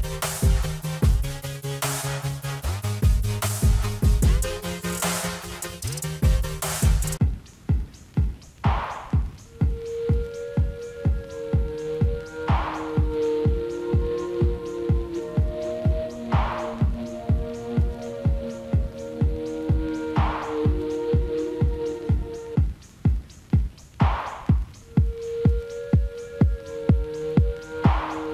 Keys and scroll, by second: 5.5 alt+w, 16.8 alt+w, 18.9 F4.